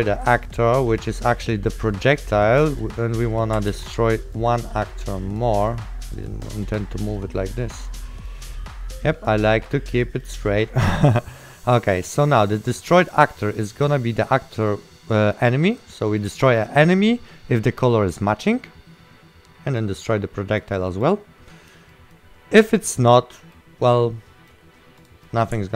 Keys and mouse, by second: 0.0 right click, 0.6 click, 1.8 right click, 3.8 ctrl+w, 6.3 right click, 7.7 click, 8.1 right click, 8.6 click, 10.3 right click, 11.9 click, 11.9 right click, 13.8 click, 16.1 right click, 19.9 click, 22.0 right click.